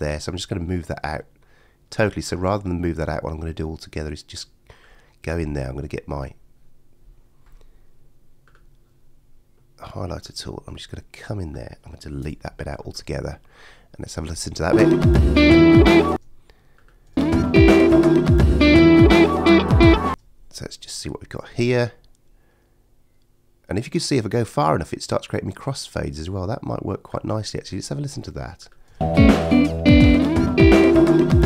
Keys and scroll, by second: 12.2 BackSpace, 14.7 space, 16.1 space, 20.1 space, 28.9 space.